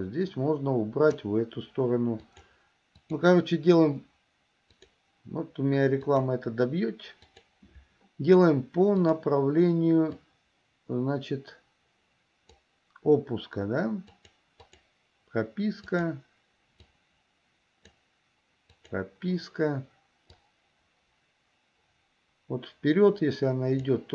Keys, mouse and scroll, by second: 2.5 drag, 9.2 click, 10.2-12.7 drag, 14.2 click, 14.9 click, 16.1 click, 17.1-18.1 drag, 18.9 click, 20.6-24.1 drag.